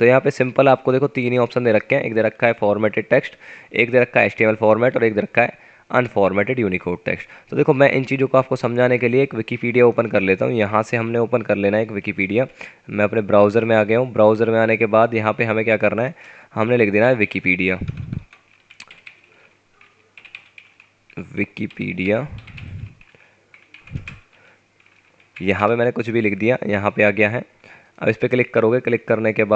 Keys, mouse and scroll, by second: 0.7 F9, 16.8-23.1 typing, 25.6 Return.